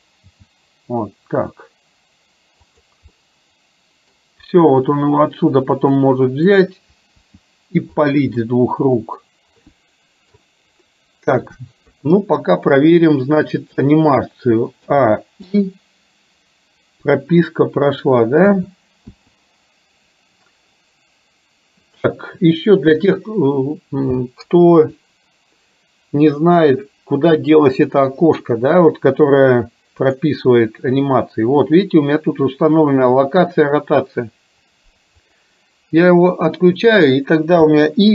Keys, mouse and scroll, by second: 0.3 g, 3.2-4.1 middle drag, 5.1-6.6 middle drag, 7.3 r, 8.5-10.3 middle drag, 12.0 KP_3, 15.0 a, 15.5 KP_9, 18.6 a, 19.2 i, 30.3-36.1 drag, 37.7 i.